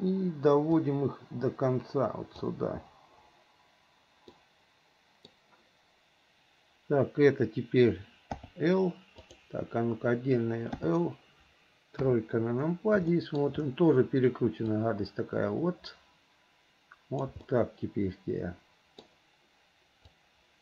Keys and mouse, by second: 1.0-2.6 drag, 4.6 middle click, 8.5 l, 9.4 click, 10.9 l, 12.1 KP_3, 13.3 shift+middle click, 15.1-17.4 drag, 17.6-19.2 middle drag, 20.4-20.6 drag.